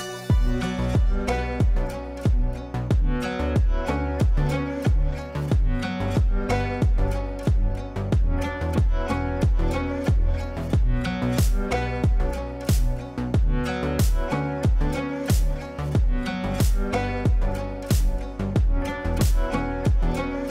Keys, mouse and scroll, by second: 3.4 click, 4.9-9.3 drag, 10.9-12.1 drag, 13.7 click, 15.2 shift+click, 15.8-16.7 typing, 16.6 click, 19.7 ctrl+z, 20.4-20.5 drag.